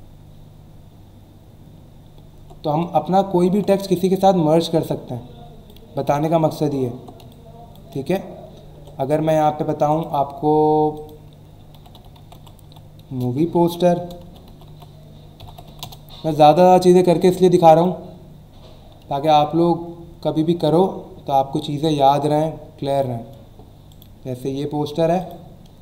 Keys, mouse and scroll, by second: 1.8-2.4 alt+scroll down 2, 2.7 v, 3.1-3.4 scroll up 1, 3.7 click, 6.0 Delete, 6.8 alt+scroll up 1, 7.2 space, 7.3 click, 7.7 space, 9.9 click, 10.9 click, 11.7 m, 13.1-15.5 typing, 15.8 Return, 17.7 click, 20.5 scroll down 1, 21.4 scroll down 1, 22.1 scroll down 1, 22.9 click, 23.9 right click, 25.2 click.